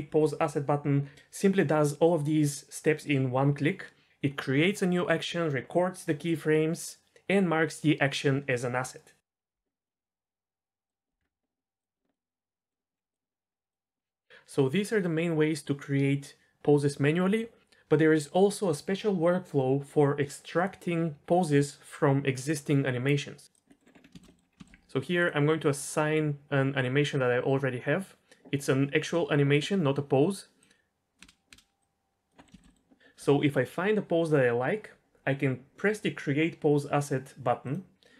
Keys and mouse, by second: 9.8-11.1 middle drag, 11.2 KP_0, 11.2 middle click, 12.1 middle click, 13.0 ctrl+z, 23.5 click, 23.7 middle click, 24.1 shift+middle click, 24.3 middle drag, 24.6 shift+middle drag, 30.8-31.2 drag, 31.2 space, 31.8 click, 31.8 space, 32.4 middle click, 32.5 shift+middle click, 32.7 middle click.